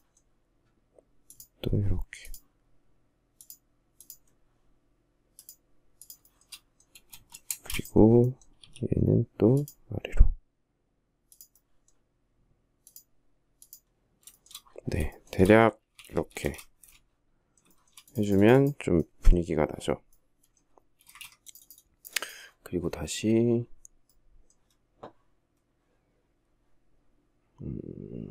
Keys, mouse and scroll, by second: 5.5 shift+middle click, 6.7 space, 7.8 s, 13.5 shift+middle click, 14.3 shift+middle click, 15.1 space, 15.2 Escape, 15.6 space, 15.7 Escape, 16.9 shift+middle click, 20.2 space, 20.3 Escape.